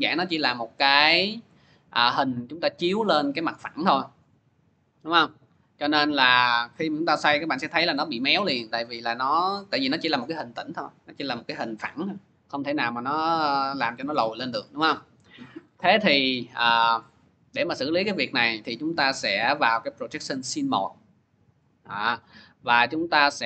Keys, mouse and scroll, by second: 13.8 click, 14.5 ctrl+z, 17.9 click, 19.6 click, 20.3 click, 20.6 click.